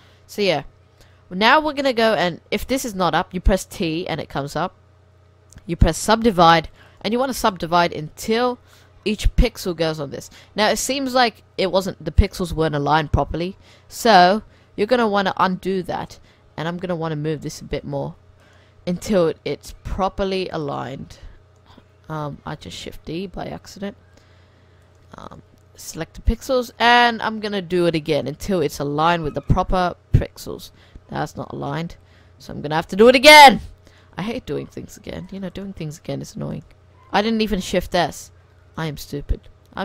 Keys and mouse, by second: 0.8-2.7 middle drag, 3.4 t, 6.1 click, 8.8-10.3 middle drag, 10.3-12.3 middle drag, 14.1 ctrl+z, 14.5 ctrl+z, 14.9 ctrl+z, 15.5 ctrl+z, 16.5 g, 17.9 shift+s, 19.3 g, 21.0 shift+d, 21.1 click, 22.4 ctrl+z, 22.7 shift+s, 23.4 g, 25.1 shift+s, 27.9 click, 29.4-31.3 drag, 30.7 ctrl+z, 31.3 ctrl+z, 31.7 ctrl+z, 32.6 ctrl+z, 33.0 g, 35.4 click, 36.7-38.3 drag, 37.4 ctrl+z, 37.6 ctrl+z, 37.8 ctrl+z, 38.4 ctrl+z, 38.8 shift+s.